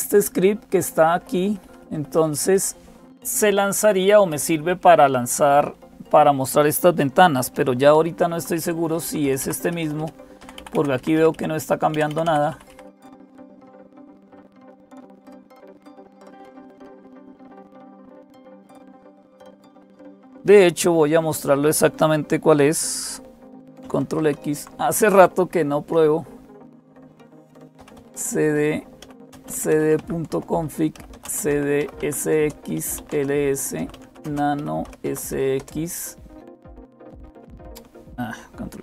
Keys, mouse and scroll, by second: 0.0-38.8 typing, 7.8 super+x, 8.9 Down, 9.0 Down, 9.2 Down, 9.4 Up, 9.6 Up, 9.8 Up, 18.0 Escape, 24.0 ctrl+x, 30.1 Return.